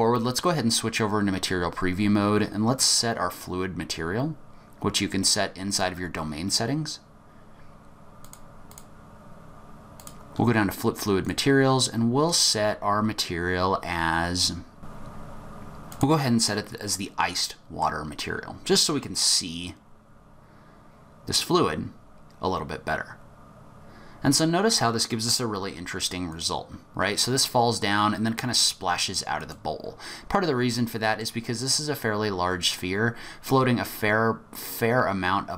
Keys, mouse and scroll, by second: 2.8 click, 3.8-4.5 scroll down 4, 5.9-7.2 scroll down 10, 8.2 click, 8.7 click, 10.1 click, 10.4-11.2 scroll down 3, 11.2 click, 16.9 middle click, 19.2 click, 26.3 click, 29.5 click, 30.7 middle click.